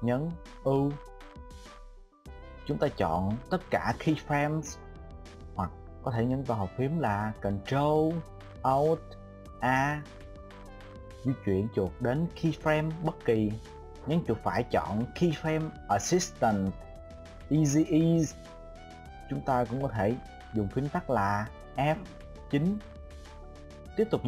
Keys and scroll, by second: 1.3 u, 9.5 alt+super+a, 21.1 F9.